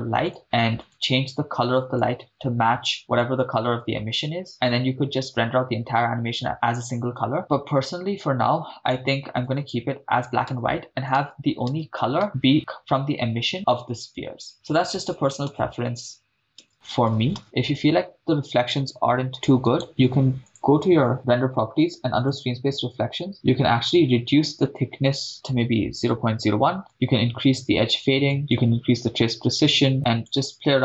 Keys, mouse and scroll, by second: 0.3 click, 0.8 click, 7.4 click, 10.5 shift+space, 11.2 shift+space, 11.7 shift+space, 12.2 shift+space, 14.0 shift+space, 15.0 shift+space, 15.5 shift+space, 16.7 shift+space, 17.1 shift+space, 17.4 shift+space, 19.8-20.5 drag, 19.8 right click, 21.1 click, 22.4 click, 24.1-26.5 drag, 26.1 0, 26.9-28.3 drag, 28.8-30.3 drag.